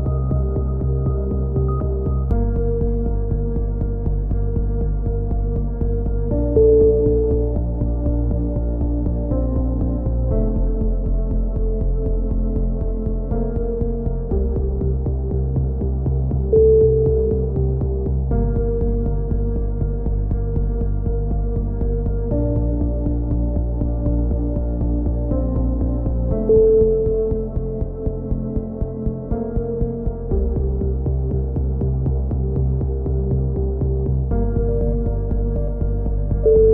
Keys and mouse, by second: 2.9 middle click, 3.9 middle click, 4.3 click, 4.8 middle click, 5.3 click, 6.1 middle click, 7.1 middle click, 7.3 click, 8.3 middle click, 8.8-10.0 right drag, 9.8 middle click, 11.5 right click, 12.8-14.2 middle drag, 14.2 right click, 15.5-16.5 right drag, 15.8 a, 16.6-17.8 right drag, 19.1 right click, 19.8-21.0 middle drag, 21.0 g, 22.3 right click, 22.9 f, 23.1 a, 23.6 middle click, 25.0 z, 25.6 z, 27.6-29.9 right drag, 28.3 alt+m, 30.1-31.8 right drag, 31.8 middle click, 32.5 click, 33.9 right click, 34.3 middle click, 34.9 click, 35.2 right click, 35.8 middle click, 36.1 click.